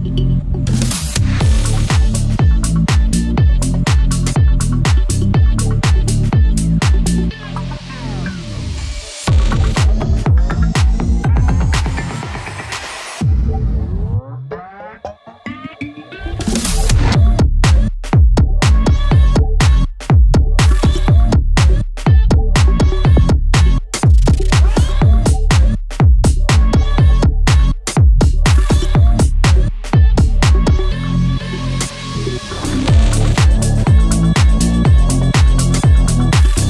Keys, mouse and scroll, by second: 2.3 ctrl+right click, 4.2-8.9 drag, 8.9 ctrl+right click, 12.4 click, 16.6 click, 31.6 scroll down 1, 32.2 click, 33.0 scroll up 1, 33.5-35.5 drag, 35.5-36.6 shift+drag.